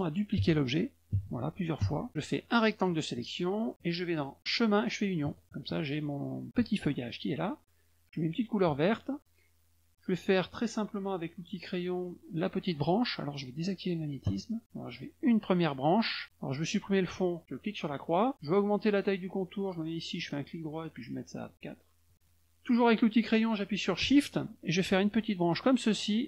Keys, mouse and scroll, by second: 2.4 click, 5.2 click, 8.3 click, 11.5 click, 14.2 click, 14.9 click, 17.9 click, 20.2 right click, 21.5 click, 22.1 click, 25.0 shift+click.